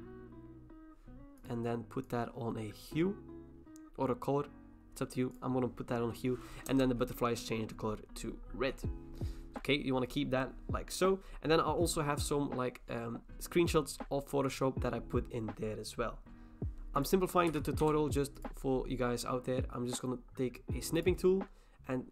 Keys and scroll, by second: 6.7 Return, 17.6-19.0 typing.